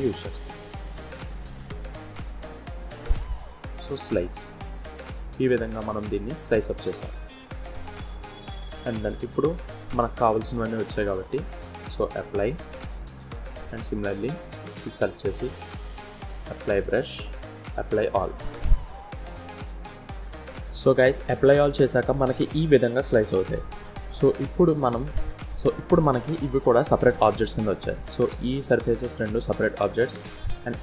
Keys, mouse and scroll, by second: 18.5 scroll down 1, 18.7-19.2 scroll up 1, 25.9 scroll down 1, 26.4 g, 28.6 click, 29.2 g.